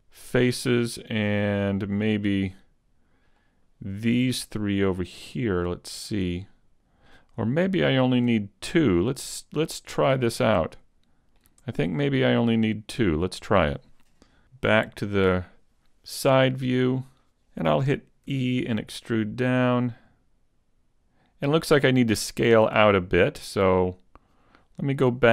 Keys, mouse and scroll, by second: 0.4 middle click, 3.3 middle click, 5.3 middle click, 5.3 shift+right click, 5.9 shift+right click, 6.3 middle click, 7.9 shift+right click, 9.3 shift+right click, 9.5 shift+right click, 10.3 shift+right click, 10.7 middle click, 12.1-13.5 shift+right click, 12.5 middle click, 15.1 KP_3, 18.3 e, 20.5 click, 20.5 scroll up 2.